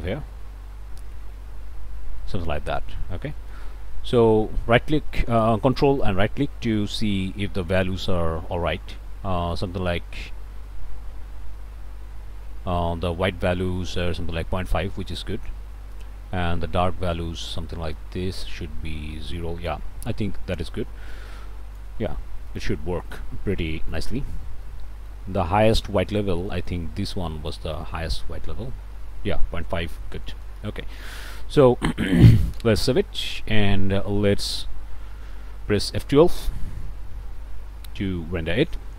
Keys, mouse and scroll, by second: 3.3 click, 6.0-22.0 ctrl+right drag, 22.0 ctrl+click, 22.1-22.4 ctrl+scroll up 1, 22.4 click, 22.5 middle click, 22.9 click, 23.5 middle click, 24.2 scroll up 1, 24.6 middle click, 25.8 middle click, 26.5 middle click, 26.6 scroll down 1, 27.5-30.1 ctrl+right drag, 30.2 ctrl+middle click, 30.6 ctrl+scroll down 1, 30.9 middle click, 31.4 scroll up 2, 31.9 middle click, 34.0 middle click, 34.8 scroll down 2, 35.2 ctrl+s, 35.8 ctrl+click, 37.1 F12.